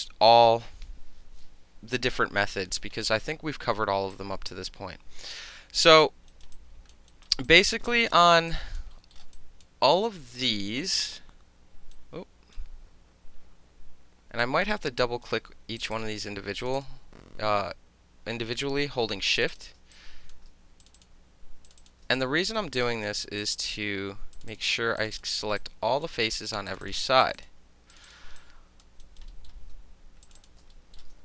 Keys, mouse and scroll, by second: 0.0 alt+middle click, 4.1-6.0 alt+drag, 6.3 alt+right click, 6.4 alt+middle click, 6.5 alt+click, 6.9 alt+middle click, 7.1 alt+right click, 7.2 alt+middle click, 7.5 alt+click, 7.7 alt+middle click, 8.0 alt+middle click, 8.2 alt+right click, 8.3 alt+middle click, 8.5 alt+click, 8.8 alt+middle click, 9.1 alt+middle drag, 9.3 alt+click, 9.6-10.4 alt+middle drag, 10.4-11.0 alt+drag, 11.0-11.9 alt+middle drag, 11.9-12.5 alt+right drag, 12.5-13.8 alt+middle drag, 14.4 alt+click, 14.8 alt+right click, 15.8 click, 15.9 click, 16.6 shift+click, 16.7 shift+click, 19.4 shift+click, 19.5 shift+click, 19.9-20.3 alt+drag, 20.3-21.8 alt+middle drag, 20.8 shift+click, 21.0 shift+click, 21.7 shift+click, 21.8 shift+click, 21.9 alt+shift+middle click, 22.2 alt+click, 22.4 alt+middle click, 22.6 alt+right click, 23.4 shift+click, 23.5 shift+click, 24.3 shift+click, 25.0 shift+click, 25.1 shift+click, 25.2-25.6 alt+shift+middle drag, 25.6 alt+click, 26.0 alt+shift+middle click, 26.7 shift+click, 26.8 shift+middle click, 27.2 shift+click, 27.3 shift+middle click, 27.4 shift+click, 27.4 shift+middle click, 27.9 shift+click, 28.0 alt+shift+middle click, 28.1 shift+click, 28.4 alt+click, 28.8 alt+middle click, 29.0 alt+click, 29.2 alt+middle click, 29.5 alt+middle click, 30.2 shift+click, 30.7 alt+middle click.